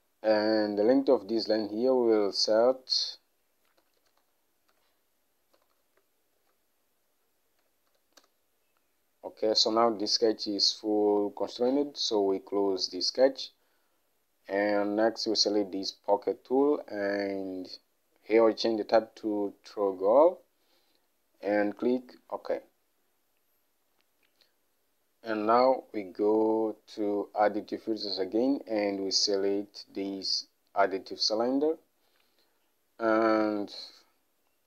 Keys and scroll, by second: 2.9-8.2 typing, 8.3 Return.